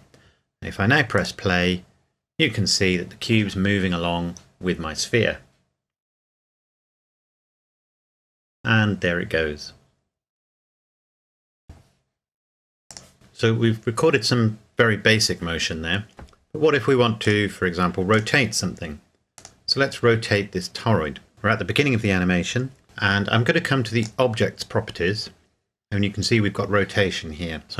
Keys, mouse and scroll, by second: 1.1 click, 12.9 click, 17.2 click, 19.4 right click, 24.0 click.